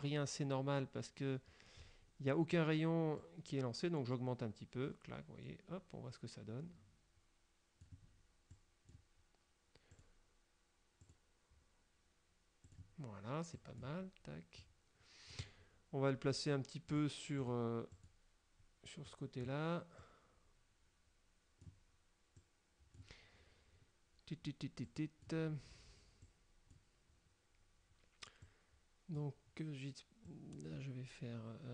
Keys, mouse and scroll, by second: 3.3-8.1 drag, 8.6 click, 10.1 click, 11.2 click, 12.8 click, 13.7 click, 14.7 click, 17.0 click, 17.5 click, 18.0 click, 19.2 click, 20.1-22.0 drag, 22.5 click, 25.0 click, 26.3 click, 28.6 click, 30.4 click.